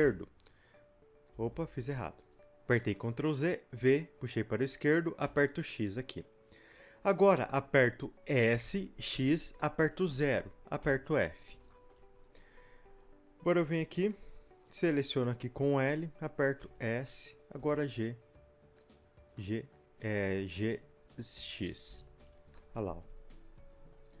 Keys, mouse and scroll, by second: 0.0 v, 1.9 ctrl+z, 3.8 v, 10.8 f, 11.3-11.7 scroll up 2, 11.7-14.7 shift+middle drag, 14.7 click, 15.5 l, 19.4-24.2 middle drag, 21.9 shift+z.